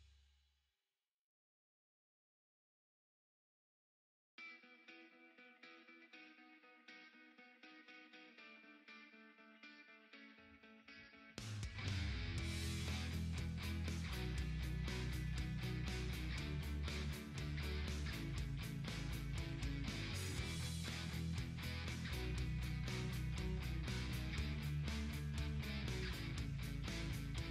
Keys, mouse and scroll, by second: 6.8 Left, 7.6 click, 7.7 Left, 8.3 Right, 9.7 click, 10.3 Right, 11.2 Left, 12.1 click, 12.3 Left, 15.8 click, 17.6-20.9 drag, 20.9 ctrl+t, 21.6 click, 22.1-22.6 scroll up 1, 22.6 click, 23.9 ctrl+t, 24.7 click, 25.6-27.5 drag.